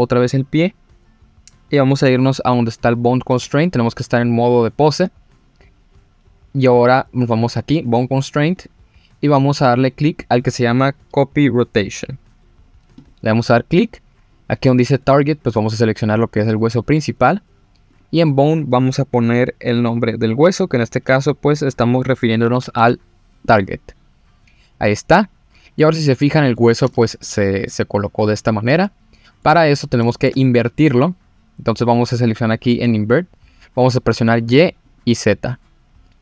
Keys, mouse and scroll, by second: 3.4 Tab, 7.5 click, 8.5-13.1 drag, 15.0 click, 17.9-23.6 drag, 25.8-26.5 middle drag, 26.9-27.2 shift+middle drag, 27.4 middle drag, 28.8-29.4 middle drag, 29.7 scroll up 2, 30.1 shift+middle click, 34.1 click, 34.8 click, 35.9-36.2 scroll down 1.